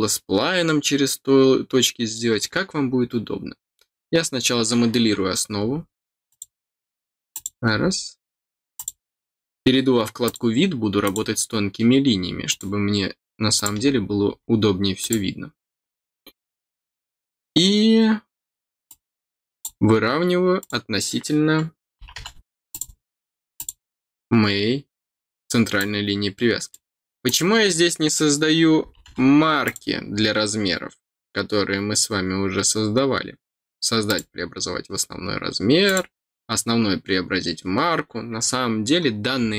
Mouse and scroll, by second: 3.8-4.2 scroll up 2, 6.2 click, 7.3 click, 8.7 click, 10.2 click, 11.0 click, 12.4 click, 13.5 click, 14.0 middle click, 14.5 middle click, 15.0 click, 18.8 click, 20.5 click, 22.7 click, 23.5 click, 25.7 click, 27.2 click, 29.6 click, 34.0 click, 35.8 click.